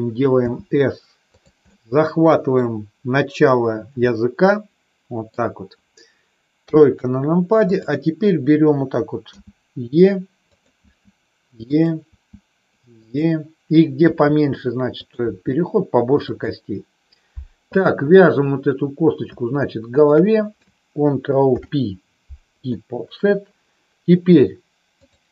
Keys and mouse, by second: 0.4 s, 1.3 click, 1.7 middle click, 4.1-5.2 middle drag, 6.6 KP_3, 9.3 e, 10.4 click, 10.7 e, 11.6 click, 12.2 e, 12.9 click, 13.9 e, 14.9 click, 15.2 e, 16.2 click, 17.8 click, 19.9 shift+click, 21.4 ctrl+p, 25.1-25.3 drag.